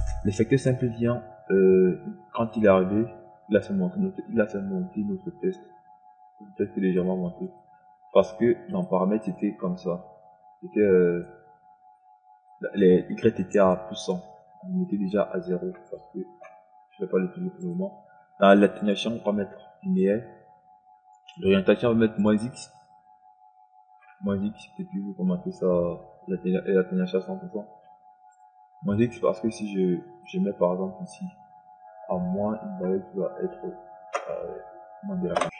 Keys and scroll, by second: 16.3 KP_0.